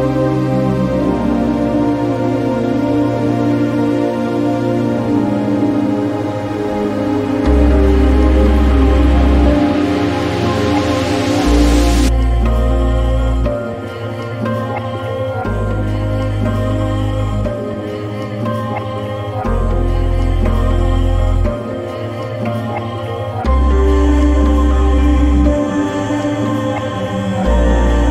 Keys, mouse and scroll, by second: 3.5-9.3 drag, 12.8 click, 23.5 click.